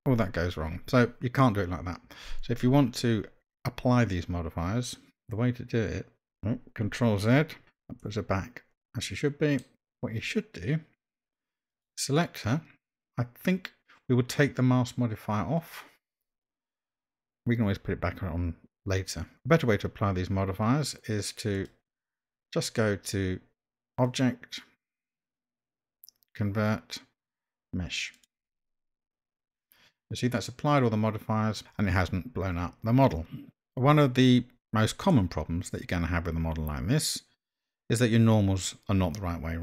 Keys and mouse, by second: 7.6 ctrl+z, 8.1-9.6 middle drag, 11.7 click, 17.3-19.1 middle drag, 21.5 click, 24.1-29.0 drag, 35.1-39.6 middle drag.